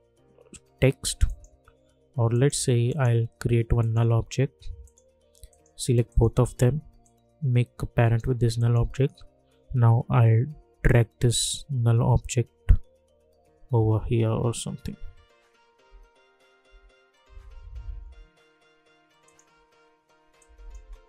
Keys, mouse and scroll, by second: 1.2 click, 2.9 right click, 3.8 click, 6.1-8.5 shift+drag, 10.4 Down, 12.9 Right, 14.3 Left, 17.9 Right, 19.2 click, 20.8 space.